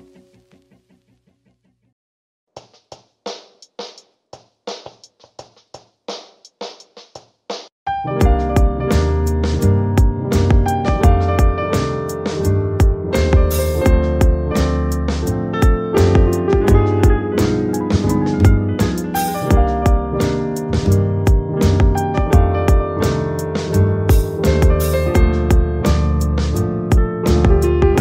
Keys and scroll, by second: 18.1 Up, 24.8 ], 25.7 ], 26.5 ].